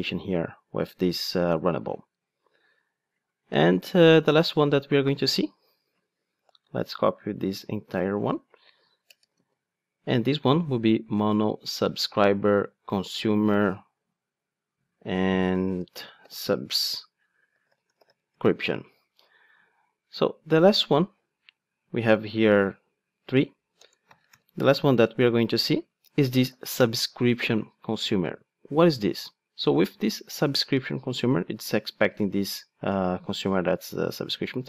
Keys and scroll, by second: 7.9 super+c, 9.3 super+v, 24.3 super+p.